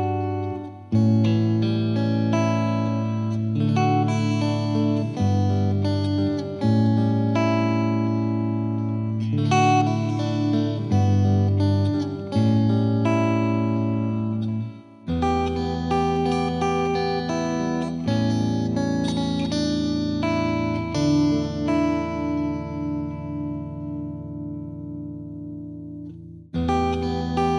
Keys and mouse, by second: 0.8 ctrl+click, 2.5 click, 3.6 click, 4.4 click, 6.1 ctrl+click, 7.5 ctrl+click, 8.3 ctrl+click, 9.1 ctrl+click, 10.7 click, 11.5 click, 13.7 click, 15.3 click, 16.3 click, 17.6 click, 19.0 click, 21.4 click, 27.4 click.